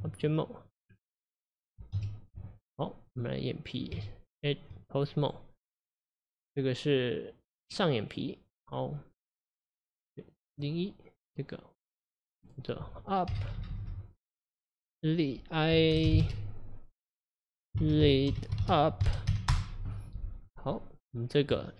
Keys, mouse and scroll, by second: 0.0 Tab, 0.4-0.9 middle drag, 0.9-2.0 scroll down 1, 2.0 KP_Divide, 3.1 click, 4.0 Tab, 5.3 click, 8.6 click, 11.2 click, 11.9 click, 12.3 click, 12.5-13.5 drag, 13.5 BackSpace, 13.6 BackSpace, 13.9 BackSpace, 21.6 Tab.